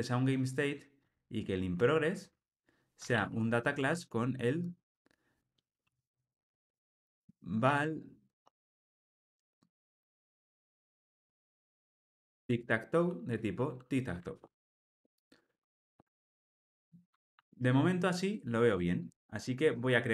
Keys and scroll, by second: 3.8 Tab, 9.9 super+z, 13.2 super+z, 13.3 Return, 14.3 alt+super+l.